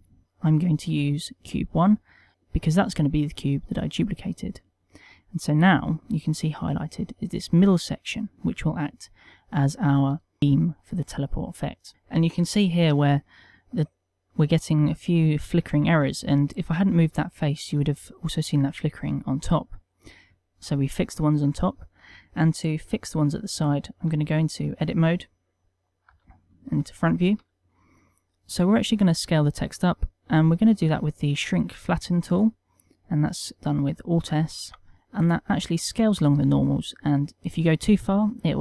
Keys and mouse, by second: 6.1 middle click, 8.7 middle click, 10.4 shift+middle click, 10.8 ctrl+middle click, 11.5 middle click, 12.9 middle click, 14.8 middle click, 17.7 middle click, 19.7 middle click, 21.3 middle click, 24.0 Tab, 24.5 middle click, 26.0 KP_1, 26.9 shift+middle click, 35.0 alt+s.